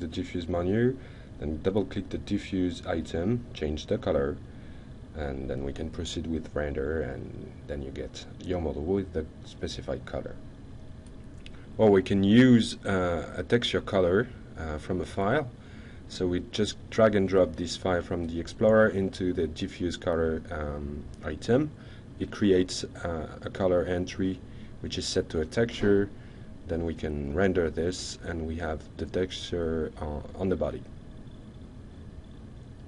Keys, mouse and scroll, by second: 0.8 ctrl+click, 1.8 ctrl+click, 2.8 ctrl+click, 4.0-4.6 ctrl+drag, 4.7-5.6 ctrl+drag, 5.9 ctrl+Escape, 6.8-7.2 ctrl+shift+middle drag, 9.7 ctrl+click, 11.7 ctrl+alt+Tab, 21.6 ctrl+click, 23.0 ctrl+click, 27.0-27.7 ctrl+shift+middle drag, 30.7 ctrl+alt+click, 31.0-31.3 ctrl+alt+middle drag, 31.6 ctrl+alt+middle click, 32.0 ctrl+alt+click, 32.6-32.8 ctrl+shift+middle drag.